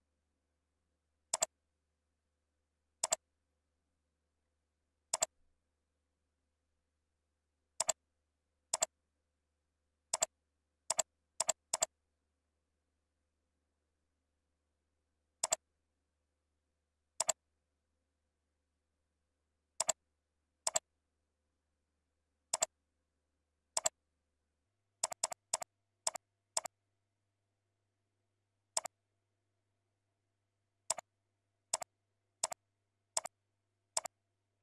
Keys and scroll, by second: 16.2 ctrl+z, 34.5 ctrl+c.